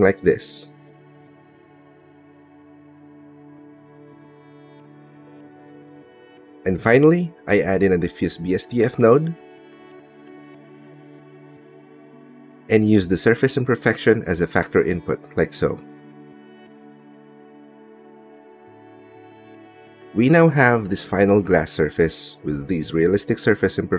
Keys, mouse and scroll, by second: 0.6-2.0 middle drag, 2.4 middle click, 3.2 middle click, 4.2 middle click, 5.0 middle click, 5.5 click, 6.4 click, 6.6 middle click, 6.9 click, 7.2 shift+a, 10.6 shift+a, 13.3 click, 14.9 click, 16.5 click, 20.0 ctrl+space, 21.2-22.6 drag.